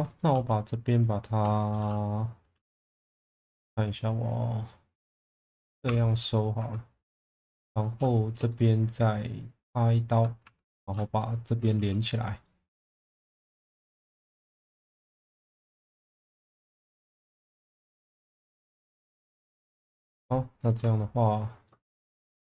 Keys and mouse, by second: 1.0 shift+click, 5.9 f, 6.6 2, 7.1 click, 8.2 shift+click, 8.6-9.9 right drag, 10.1 1, 10.4 2, 10.8 click, 11.5 shift+click, 11.8 f, 12.4 middle click, 14.1 middle click, 14.9 1, 15.5 alt+middle click, 16.9 click, 18.6-19.0 middle drag, 19.4 shift+middle drag, 20.0 2, 21.8 middle click.